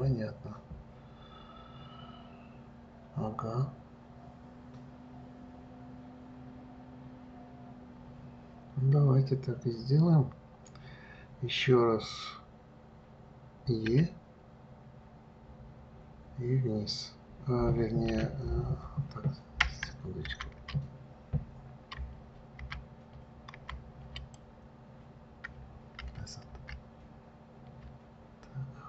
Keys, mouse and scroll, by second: 14.3 e.